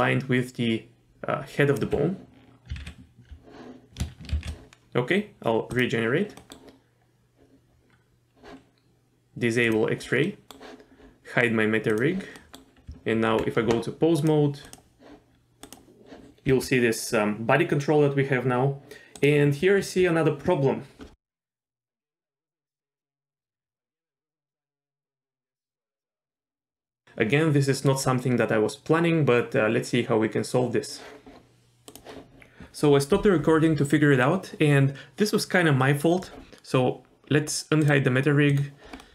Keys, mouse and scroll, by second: 1.8 d, 1.8 d, 2.8 ctrl+z, 4.4 ctrl+shift+z, 5.7 drag, 6.4 middle click, 9.6 click, 10.3 middle click, 11.9 click, 12.4 middle click, 12.9 Tab, 14.2 click, 14.6 click, 15.6 click, 16.5 g, 21.0 middle click, 22.5 g, 37.9 click, 38.5 click, 39.0 middle click.